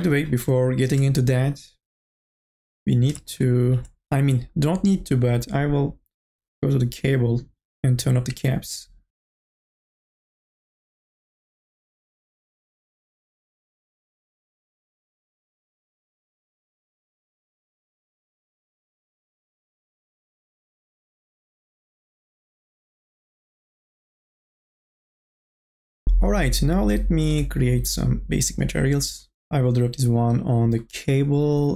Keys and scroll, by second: 13.5 r, 13.9 e, 15.4 r, 15.9 e, 16.2 r, 16.7 e, 18.1-19.3 typing, 20.9 space, 21.4 r, 22.0 ctrl+z, 22.6 e, 24.6 1, 24.7 space.